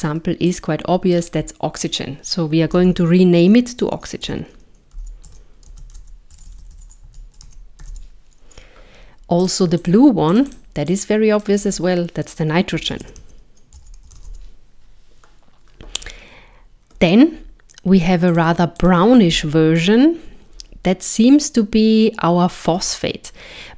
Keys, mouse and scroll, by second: 6.5 BackSpace, 6.6 BackSpace, 9.9 click, 10.3 click, 10.5 click, 18.8 click.